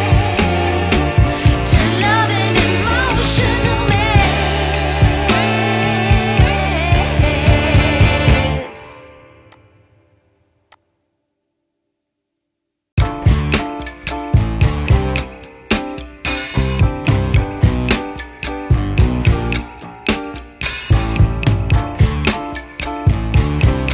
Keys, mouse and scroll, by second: 6.2 click, 7.8 click, 9.4 click, 10.7 click, 12.2 click, 12.3 F10, 14.8 click.